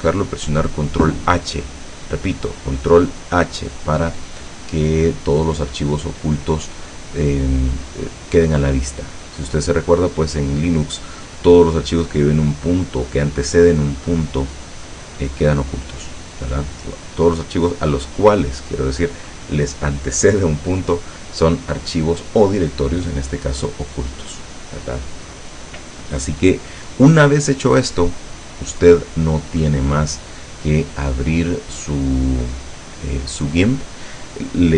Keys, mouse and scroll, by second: 9.5 click, 10.7-11.9 drag, 16.5 click.